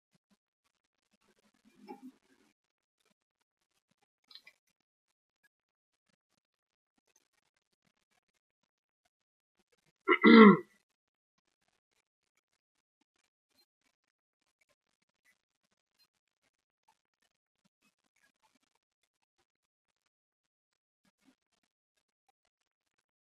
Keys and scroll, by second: 5.4 Escape, 7.8 F6, 8.5 F5.